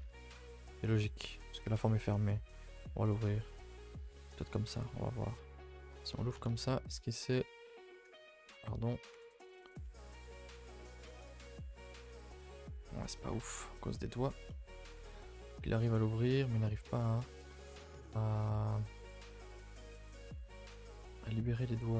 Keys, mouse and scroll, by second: 0.1 a, 0.4-2.4 middle drag, 2.4 2, 2.6 middle click, 3.1 alt+click, 3.3-5.3 middle drag, 5.3 right click, 5.6 a, 5.7 a, 8.2 ctrl+z, 9.1 a, 10.6 u, 13.5 ctrl+z, 14.2 ctrl+z, 14.5 middle click, 14.7 scroll down 1, 14.8 a, 15.0 a, 15.1 middle click, 15.4-15.7 scroll up 4, 15.7-20.0 shift+middle drag, 20.0 a, 20.1 a, 20.3 middle click, 20.6 2, 21.0 alt+Left, 21.2-21.9 middle drag.